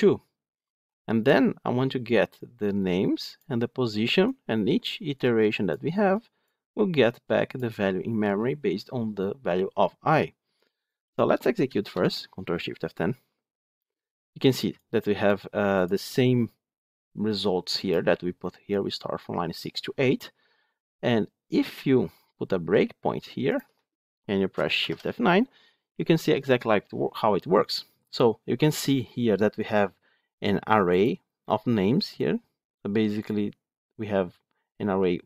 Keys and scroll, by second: 11.8 ctrl+shift+F10, 23.5 ctrl+F8, 24.7 shift+F9.